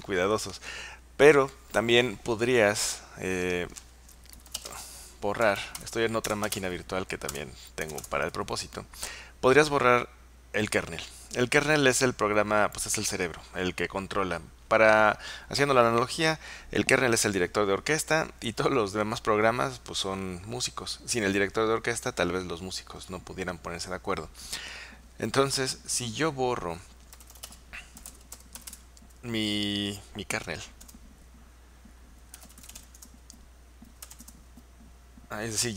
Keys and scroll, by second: 4.2-8.4 typing, 7.3 Return, 26.9-34.7 typing.